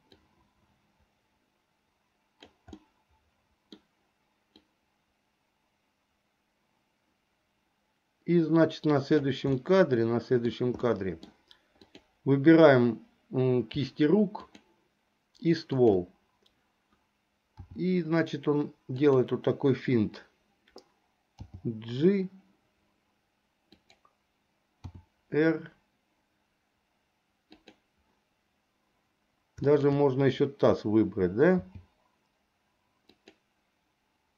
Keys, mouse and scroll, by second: 0.3-2.6 drag, 2.8-4.0 middle drag, 4.8-9.4 drag, 9.6-10.6 middle drag, 11.0 middle click, 12.0 click, 14.5 shift+click, 17.7 r, 21.4 g, 24.9 r, 29.7 shift+click, 31.6 g.